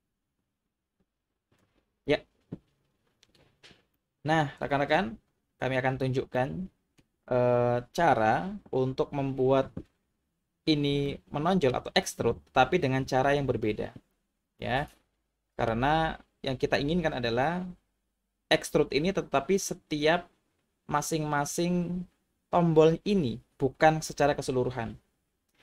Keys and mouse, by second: 4.2-4.9 middle drag, 6.3-7.0 middle drag, 11.2-11.7 middle drag, 14.7-15.7 middle drag.